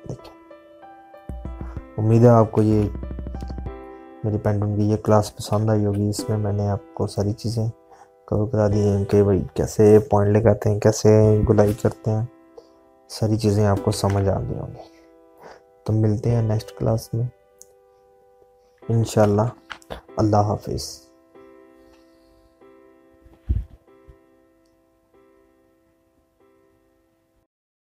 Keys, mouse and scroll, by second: 1.9 click, 5.2 click, 8.3 click, 16.2 click.